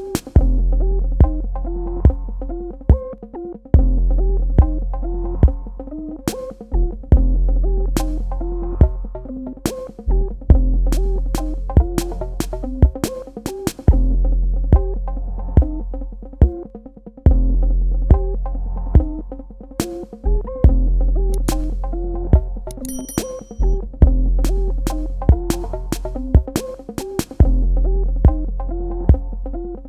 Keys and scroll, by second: 3.2 KP_Subtract, 12.0 shift+Num_Lock, 13.3 z, 19.7 ctrl+z, 25.1 z.